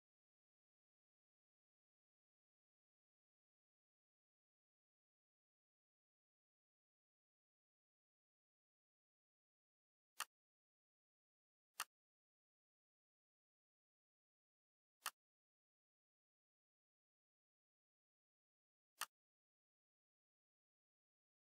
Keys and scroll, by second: 1.4-3.7 typing, 5.3-9.1 typing, 13.4 ctrl+shift+c, 17.1 ctrl+shift+v.